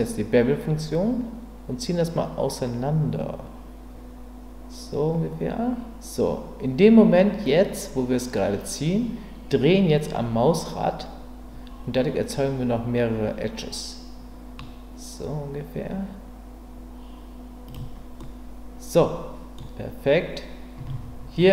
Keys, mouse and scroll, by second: 17.7 click, 18.2-19.6 middle drag.